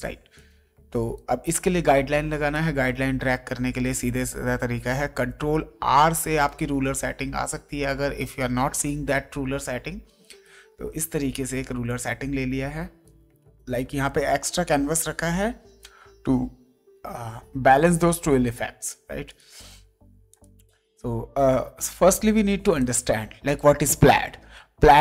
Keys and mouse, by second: 0.4 click, 2.5 click, 4.9 click, 8.8 click, 11.9 click, 19.2 click, 22.8 click.